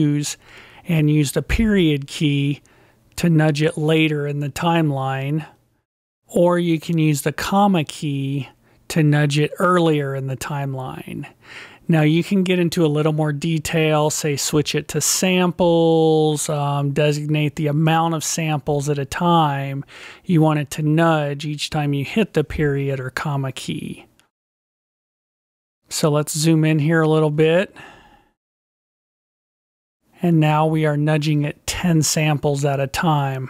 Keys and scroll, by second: 1.6 ., 2.4 ., 6.4 ,, 26.4 ., 28.0 ..